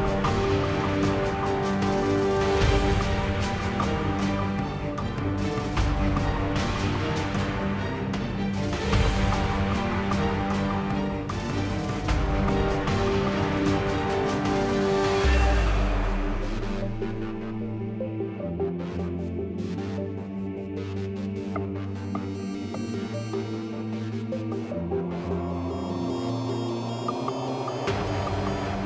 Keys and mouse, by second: 0.1 Tab, 0.8 Tab, 1.0 Tab, 1.0 KP_7, 1.1 z, 1.6 Tab, 1.6 z, 2.1 click, 2.3 KP_7, 4.0 shift+e, 4.6 shift+e, 4.9 shift+e, 5.3 Tab, 5.9 Tab, 6.0 ctrl+z, 6.1 ctrl+z, 6.2 ctrl+z, 6.3 ctrl+z, 6.5 Tab, 6.8-9.8 typing, 9.0 Tab, 11.2 z, 11.8-12.2 drag, 12.1 shift+e, 12.7 click, 13.3 g, 13.7 g, 14.5-15.6 drag, 14.7 g, 15.8 Tab, 15.9 z, 16.1 Tab, 16.6 Tab, 16.7 Tab, 17.1 Tab, 17.5 Tab, 17.9 z, 18.6 z, 18.8 Tab, 19.5 alt+c, 19.8 Tab, 19.9-23.2 typing, 25.0 Tab, 25.8 Tab, 26.3 KP_Decimal, 27.9 Tab, 28.2 ctrl+z, 28.3 ctrl+z, 28.5 Tab, 28.7 Tab.